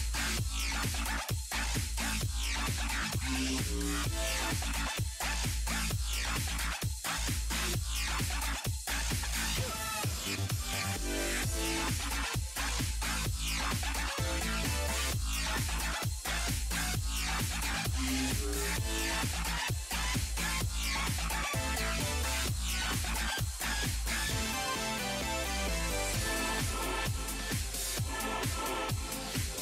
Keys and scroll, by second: 3.2 s, 5.1 s.